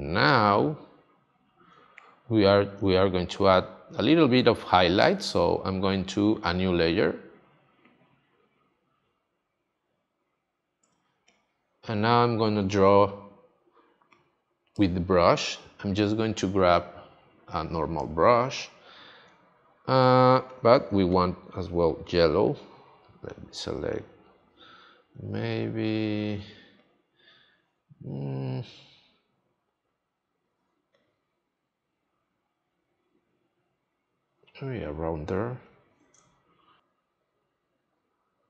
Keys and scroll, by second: 10.8 space, 36.1 space.